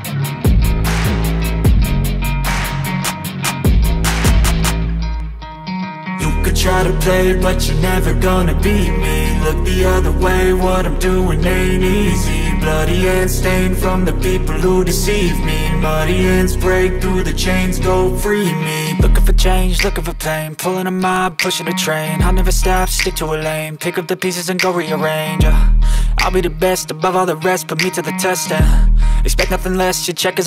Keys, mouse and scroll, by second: 0.8 shift+click, 0.9 shift+a, 3.3 g, 3.5 s, 5.9 click, 7.6 a, 8.2 g, 9.3 click, 9.7 space, 14.1 space, 14.2 click, 14.9 click, 17.5 a, 17.7 g, 18.1 space, 28.4 space, 30.2 click.